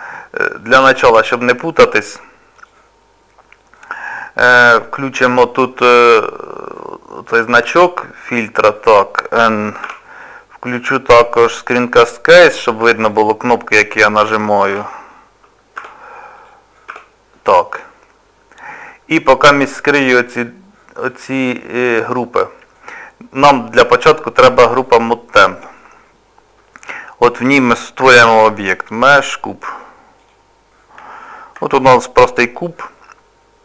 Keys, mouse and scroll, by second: 14.7 m, 16.4 click, 16.9 n, 20.3 click, 21.0 click, 24.9 click, 28.2 shift+a, 31.1 shift+middle click, 31.8 middle click.